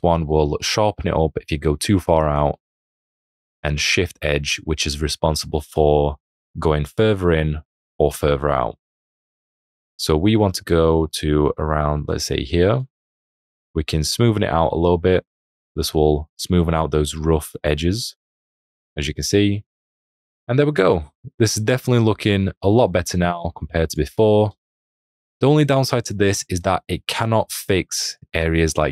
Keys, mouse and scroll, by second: 24.6 space, 24.8 click.